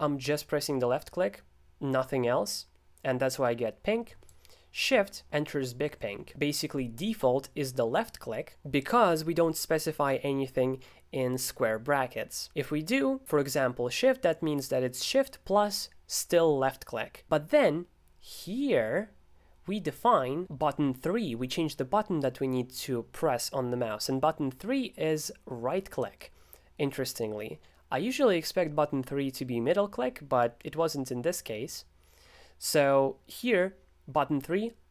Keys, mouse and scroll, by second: 4.3-5.3 shift+drag, 6.3 alt+super+f, 18.5-20.4 drag, 20.4 alt+super+f, 25.2-28.5 drag, 30.8-32.9 middle drag.